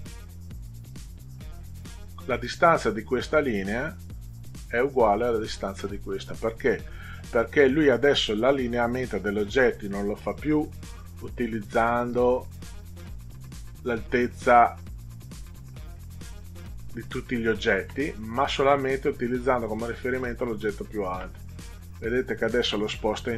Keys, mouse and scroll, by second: 11.6 click, 21.8 click.